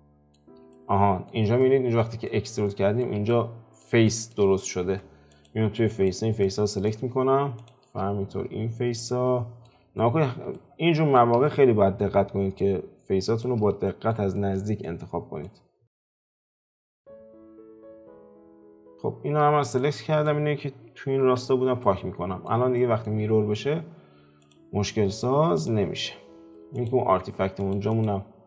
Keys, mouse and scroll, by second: 4.8 Tab, 5.9 click, 6.4-7.6 middle drag, 7.6 shift+click, 8.1-9.0 scroll up 1, 9.0-10.4 middle drag, 10.4 scroll up 1, 10.5-12.6 ctrl+middle drag, 12.6 shift+click, 13.8-15.4 middle drag, 15.4 shift+click, 16.4 shift+click, 16.6-18.3 middle drag, 18.3 shift+click, 18.8 shift+click, 19.4-19.7 scroll down 4, 19.7-21.2 middle drag, 21.2 x, 21.8-24.4 middle drag, 24.4 click, 25.9 click, 26.3 scroll down 2, 26.7 click, 27.0 Tab, 27.9 click, 28.2 scroll down 5.